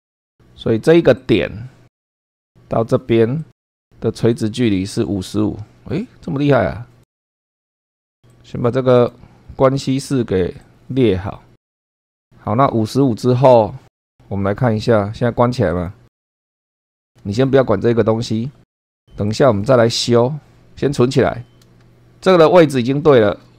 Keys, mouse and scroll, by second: 0.0 super+2, 1.2 click, 2.1 scroll up 1, 3.4 click, 4.3 click, 7.0 click, 7.2-8.3 scroll down 2, 7.4 shift+middle click, 8.3-9.3 drag, 10.6-11.7 drag, 15.7 click, 17.0 shift+middle click, 19.3 click, 23.0 shift+middle click.